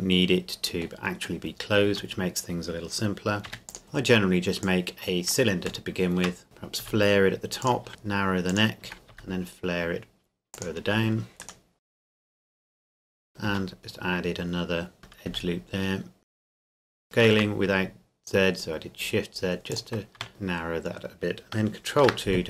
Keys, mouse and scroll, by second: 0.0 middle click, 1.2-1.6 scroll up 1, 1.9 Tab, 3.4 e, 3.7 click, 3.8-4.6 scroll down 1, 4.6 click, 5.9 shift+middle click, 6.4 click, 6.8 s, 7.6 click, 7.9 s, 8.5 click, 9.1 s, 10.5 click, 11.4 alt+right click, 11.8 s, 12.0 click, 12.2 scroll down 1, 12.4 click, 12.7 s, 12.8 click, 13.0 ctrl+r, 13.1 click, 13.5 s, 15.0 alt+right click, 15.3 s, 16.2 click, 17.0 alt+shift+right click, 17.2 shift+z, 19.7 click, 20.2 Tab, 22.0 ctrl+2.